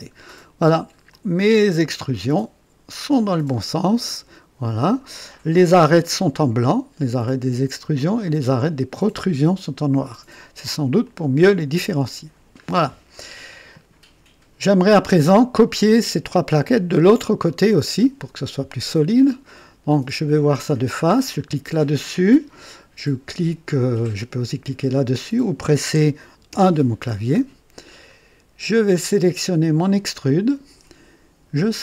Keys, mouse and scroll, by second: 0.1 scroll up 1, 0.6 scroll down 1, 1.1-5.1 drag, 10.4 scroll down 1, 11.0 click, 12.3-12.7 scroll down 1, 13.7 click, 26.5 KP_1, 27.3-27.7 scroll up 1, 28.1 right click, 29.8 click.